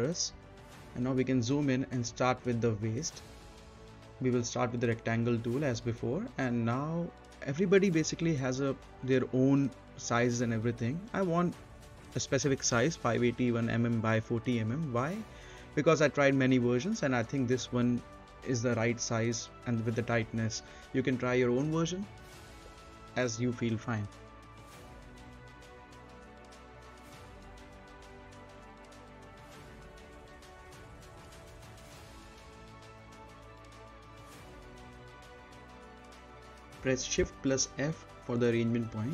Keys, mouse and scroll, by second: 1.4-2.0 scroll down 1, 2.0 middle click, 3.5 click, 5.1-5.5 scroll down 1, 5.5 middle click, 5.7 scroll up 1, 6.0 middle click, 7.5-10.1 drag, 10.1 right click, 10.9 scroll down 1, 11.3-14.1 right drag, 14.3 right click, 14.4 z, 15.5 click, 16.1 right click, 17.7 click, 19.0-20.2 typing, 20.9 click, 24.7 right click, 25.9 click, 26.3-27.8 typing, 27.7 click, 28.5 middle click, 28.7 scroll up 1, 29.0 click, 29.2 right click, 29.7 click, 30.2 4, 30.7 click, 31.7 middle click, 32.3 scroll down 1, 32.6 click, 32.7 right click, 33.5 click, 34.1 4, 34.6 click, 35.6-36.6 scroll up 2, 35.7 middle click, 36.6 right click, 37.1 scroll up 1, 37.5 middle click, 37.8 right click, 38.9 shift+f.